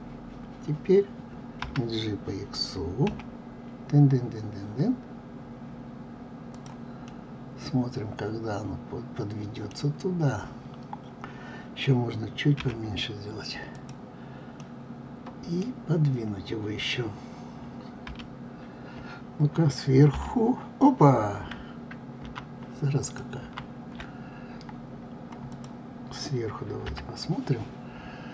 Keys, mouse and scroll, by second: 1.6 g, 7.1-10.1 middle drag, 12.6 s, 14.6-17.6 middle drag, 18.1 g, 23.4 ctrl+z, 25.5 click, 26.9 KP_7.